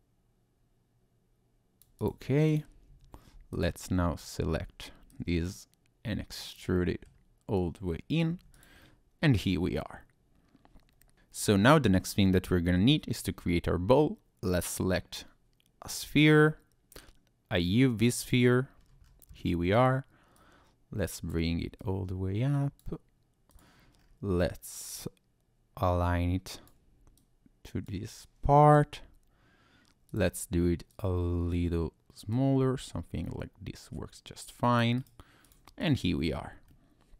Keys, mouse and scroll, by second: 2.0 click, 2.5 click, 2.9 Tab, 3.5 alt+click, 4.2 alt+click, 5.1 click, 6.7 middle click, 7.5 click, 8.5 Tab, 8.5 click, 8.8 middle click, 12.7 shift+a, 18.8-19.4 scroll down 4, 19.3 scroll up 1, 20.3 click, 21.8 click, 23.5 click, 24.0-24.7 scroll up 2, 25.0 click, 27.1 click, 28.5 s, 30.1 click, 30.9 click, 32.3 click, 35.0 right click, 35.8 click, 36.1-36.5 scroll down 1, 36.7 middle click.